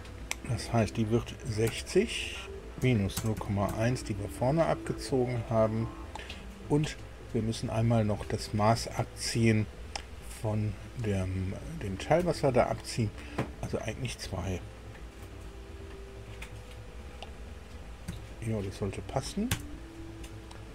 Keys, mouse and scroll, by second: 1.5 KP_6, 1.7 KP_0, 2.8 KP_Subtract, 3.1 KP_0, 3.3 KP_Decimal, 3.7 KP_1, 12.2 KP_Subtract, 18.1 KP_2, 19.5 KP_Enter.